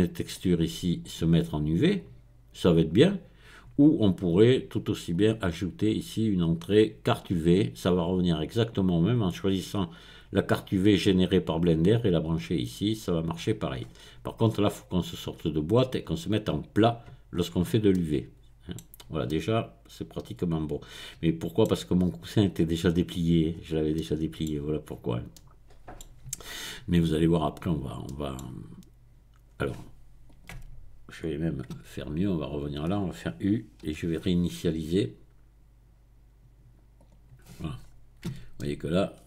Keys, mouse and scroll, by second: 0.3 click, 1.0 click, 2.0-3.3 drag, 5.1 click, 7.3 click, 8.3 click, 9.1 click, 9.9 click, 12.3 click, 13.8-14.9 scroll up 1, 15.5 click, 16.6 click, 17.3-17.9 scroll down 1, 17.9-23.5 middle drag, 23.5-23.9 scroll up 1, 23.9 middle click, 25.3-26.3 middle drag, 28.1 middle click, 30.3 click, 31.7 Tab, 33.9 u, 37.0 click, 37.8-38.6 scroll up 1, 38.3 Tab, 38.6-39.2 drag.